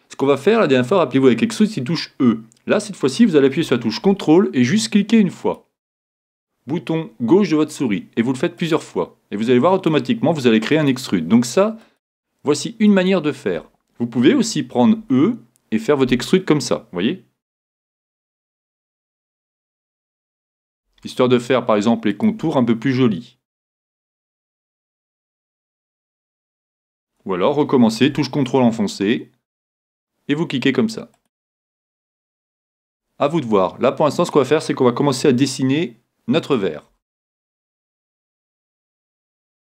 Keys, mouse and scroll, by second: 5.4-7.4 drag, 8.6-14.8 drag, 15.0 e, 16.1-18.0 drag, 17.6 e, 18.8-28.8 drag, 19.1 e, 20.8 e, 22.5 e, 24.0 e, 25.6 e, 29.8-33.1 drag, 32.9 e, 34.3-36.3 drag, 35.2 e, 36.5-39.7 drag, 36.9 e.